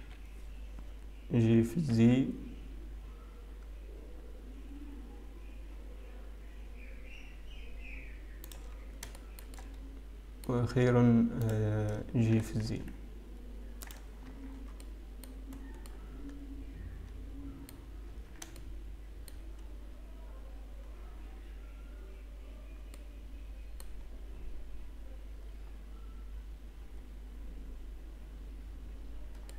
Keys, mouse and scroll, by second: 0.0 click, 0.0 KP_3, 1.7-4.3 scroll down 2, 1.7 g, 9.0-10.9 scroll up 2, 10.9 shift+middle click, 10.9-14.2 scroll up 2, 14.2 click, 14.2-14.8 scroll down 3, 14.2 g, 14.8 Tab, 14.8-15.3 scroll down 2, 15.7 middle click, 15.7 scroll down 2, 17.7 middle click, 18.3 Tab, 18.3 scroll up 4, 19.1 shift+middle click, 19.7-20.9 scroll up 1, 21.2 scroll down 1, 23.4 middle click, 25.5-25.9 scroll down 1, 25.9 scroll down 1.